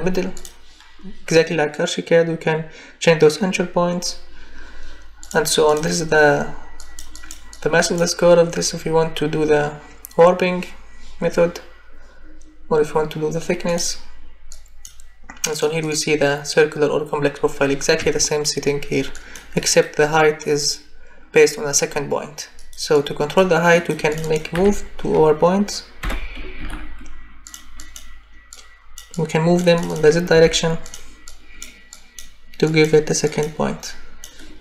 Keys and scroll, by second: 18.0 Escape, 24.5 m, 26.0 o, 26.6 v, 30.3 z.